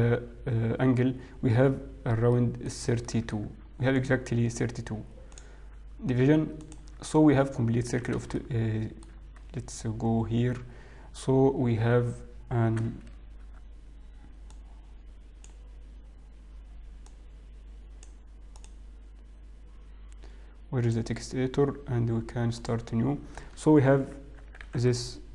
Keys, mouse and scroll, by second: 2.7 middle click, 3.5 middle click, 4.3 alt+click, 5.7 click, 7.3 click, 8.9 shift+middle click, 12.4-13.1 scroll down 2, 13.1 n, 16.2 click, 16.2 n, 18.3 click, 20.0 click, 22.9 click.